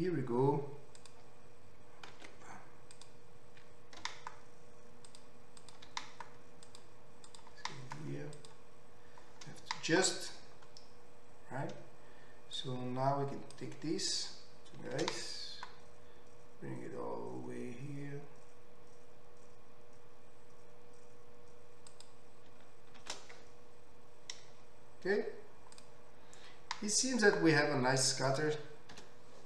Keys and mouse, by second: 1.0 click, 1.2-3.0 ctrl+middle drag, 2.3 ctrl+x, 3.0-4.0 drag, 4.0 g, 5.6 click, 6.0 g, 7.4 click, 7.5-12.6 middle drag, 7.6 g, 12.6-22.0 drag, 15.3 shift+d, 22.0-28.3 middle drag, 23.6 shift+r, 28.3 click, 28.4-29.4 middle drag, 29.0 l.